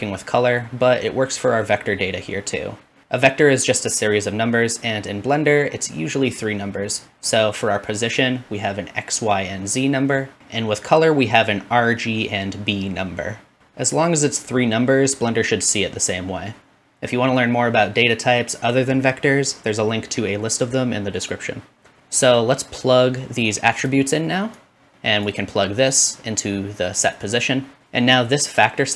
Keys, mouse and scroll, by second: 10.0-22.0 middle drag, 22.0-28.9 drag.